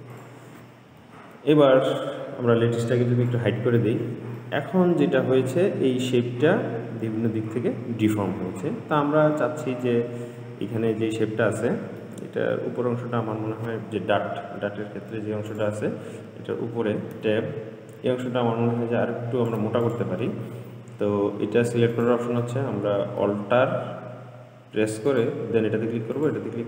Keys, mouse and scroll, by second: 0.4 click, 1.3 Tab, 1.7 Tab, 3.5 click, 4.6-7.7 middle drag, 9.6-10.1 scroll up 2, 10.1-12.6 middle drag, 12.6-14.7 scroll up 3, 14.7-15.3 scroll up 1, 15.3 Tab, 15.8 click, 17.4 Tab, 18.5 click, 20.1 click, 22.2 click, 25.3 alt+click, 26.4 alt+click.